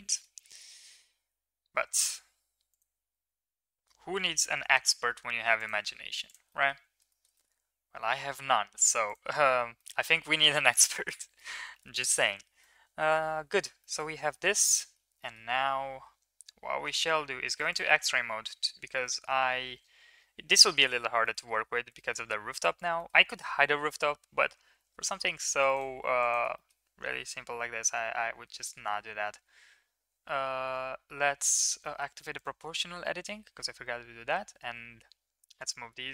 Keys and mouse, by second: 0.1 middle click, 0.5 z, 5.7 g, 6.6 middle click, 7.4 middle click, 7.9 s, 9.5 middle click, 9.7 middle click, 10.4 middle click, 10.8 middle click, 11.3 shift+middle click, 12.7-13.2 middle drag, 14.5-15.0 middle drag, 15.1 middle drag, 18.5 KP_7, 20.6 shift+middle click, 21.2 shift+middle drag, 22.1 middle click, 23.3 Tab, 24.6 ctrl+r, 26.1 drag, 26.5 middle drag, 29.3 g, 32.3 click, 33.3 g.